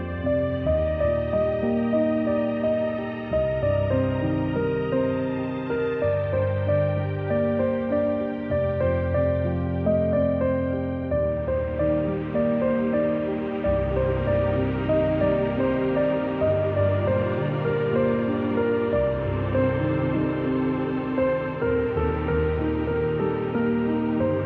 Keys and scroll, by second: 12.0 g, 13.6 v, 13.9 z, 14.3-14.8 space, 16.6-17.1 space, 17.2 v, 19.6 z, 20.1 z, 20.7 a, 23.8-24.2 typing.